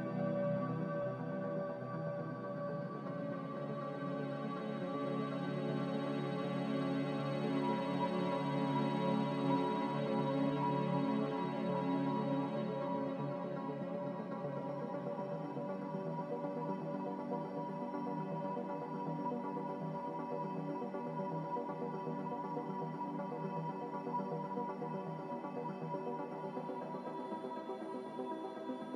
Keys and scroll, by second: 5.7 q, 6.5 q, 22.9 Escape, 26.2 z.